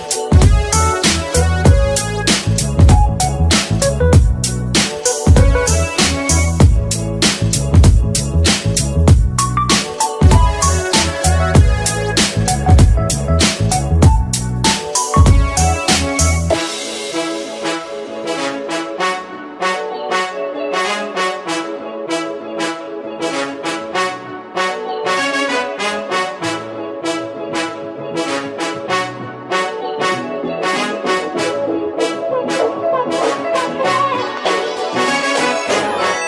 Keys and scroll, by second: 9.2 ctrl+a, 13.8 ctrl+v, 25.0 Delete, 25.6 Delete, 28.2 Delete.